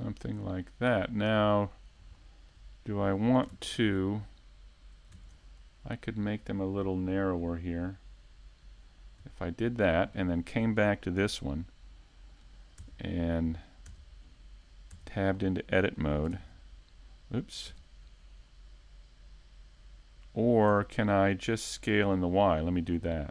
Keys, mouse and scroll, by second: 0.1 middle click, 1.4 scroll down 1, 2.4 click, 2.4 scroll down 1, 2.7 scroll up 1, 7.9 middle click, 9.4 right click, 10.1 click, 12.5-12.8 scroll down 1, 13.2 shift+middle click, 14.4 middle click, 15.1 shift+middle click, 15.5-16.1 scroll down 3, 15.8 middle click, 19.3 Tab, 19.7-20.4 scroll up 3, 20.0 shift+middle click, 20.4 middle click, 20.9 shift+middle click, 21.3-21.7 scroll up 1, 22.0 right click, 22.3-23.3 scroll down 8, 23.2 middle click.